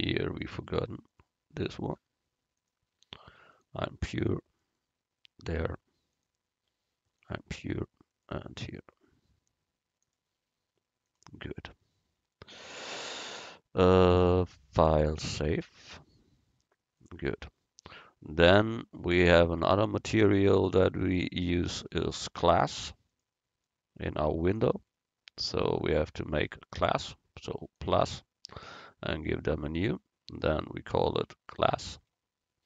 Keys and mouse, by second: 0.0 middle click, 1.2-4.4 right drag, 2.7-4.4 drag, 6.2 click, 6.2-8.0 right drag, 10.1-12.0 middle drag, 14.6 middle click, 16.1-18.0 drag, 23.2-25.0 right drag, 27.8-32.4 drag.